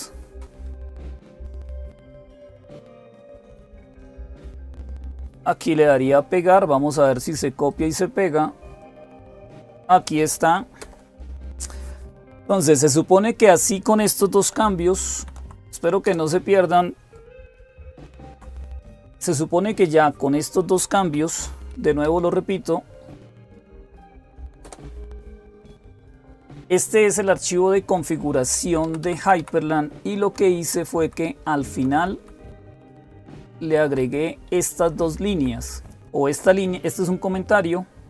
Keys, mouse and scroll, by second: 0.7 Page_Down, 0.7 Down, 1.6-2.1 Page_Down, 3.4 Page_Down, 3.4 Up, 3.8 Return, 7.5-8.5 right drag, 8.6 click, 10.6 Return, 14.9 ctrl+o, 15.8 Return, 17.9 ctrl+x, 21.5 Up, 24.4 Return, 28.2 Down, 28.4 Down, 28.6 Down, 28.8 Down, 29.0 Down, 30.0 Down, 30.0 Page_Down, 30.8 Page_Down, 31.1 Page_Down, 31.5 Page_Down, 31.7 Page_Down, 32.2 Page_Down, 32.6 Page_Down, 33.0 Page_Down, 33.2 Page_Down, 33.4 Page_Down, 34.6 Page_Down, 34.6 Up, 34.8 Up, 35.1 Up, 36.5-38.0 Right, 37.1 Up.